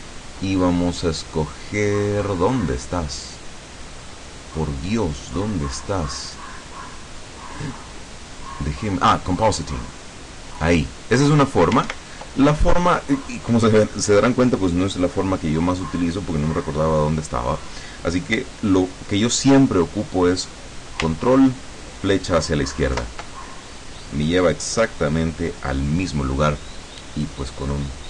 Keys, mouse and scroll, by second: 10.1 click, 12.0 ctrl+Right, 23.1 ctrl+Left.